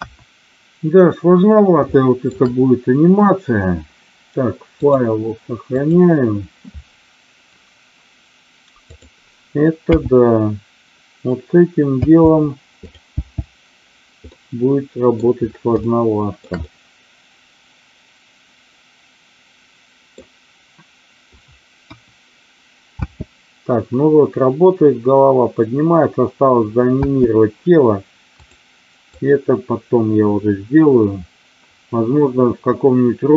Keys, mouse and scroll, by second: 1.9 shift+middle click, 4.9-6.1 drag, 13.0 n, 14.3-15.2 middle drag, 15.7-16.4 shift+middle drag, 16.6-20.2 middle drag, 21.8 KP_1, 22.9 space, 27.1 space, 28.4 click, 29.2-33.3 drag.